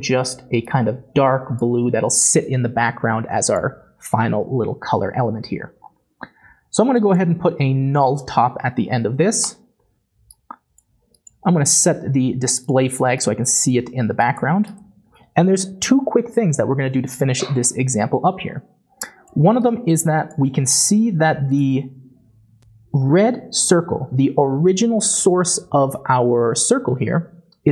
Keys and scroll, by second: 8.9 n, 9.0 u, 9.2 l, 9.4 Return, 13.7-16.1 typing.